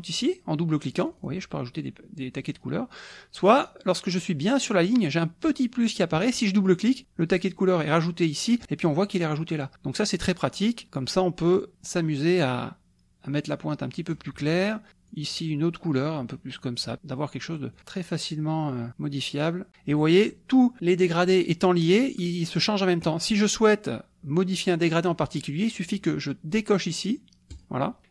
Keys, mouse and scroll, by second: 1.2 click, 6.8 click, 12.4-14.3 drag, 15.1 click, 16.2 click, 17.7 click, 18.7-19.7 drag, 27.5 click.